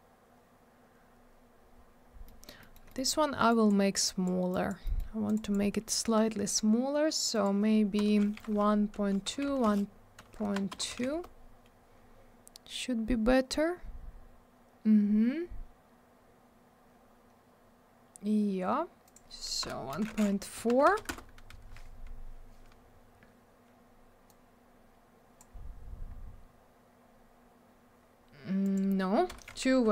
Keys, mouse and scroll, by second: 2.2 middle click, 2.6 middle click, 2.7 middle click, 2.8 middle click, 2.9 double middle click, 3.5 click, 3.6 click, 4.0 click, 4.5 click, 4.6 click, 4.8 middle click, 4.9 double middle click, 5.2 click, 5.3 click, 5.4 click, 5.5 double click, 7.3 click, 7.4 click, 8.0 BackSpace, 8.2 2, 8.5 Tab, 9.4 BackSpace, 9.6 Return, 10.7 BackSpace, 10.9 2, 11.1 Return, 12.4-13.2 scroll up 1, 14.0 scroll down 1, 15.1 scroll up 1, 15.8-17.1 scroll down 1, 17.9-19.0 scroll down 1, 19.0 click, 19.1 click, 19.6 BackSpace, 19.9 4, 20.1 Tab, 20.5 Right, 20.8 BackSpace, 20.9 4, 21.1 Return, 24.2 click, 26.0-26.9 scroll up 1, 26.9-28.2 scroll down 1, 28.6 click, 28.7 click, 29.3 BackSpace, 29.4 2.